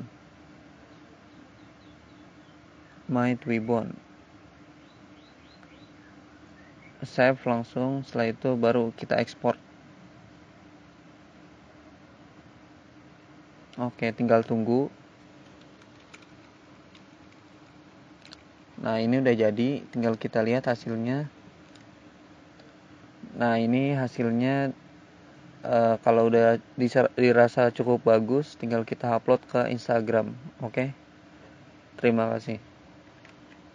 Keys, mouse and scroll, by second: 0.5 ctrl+a, 0.6-4.5 typing, 7.4 click, 9.4 click, 9.7 click, 17.4 click, 17.7 click, 31.6 click, 32.9 click.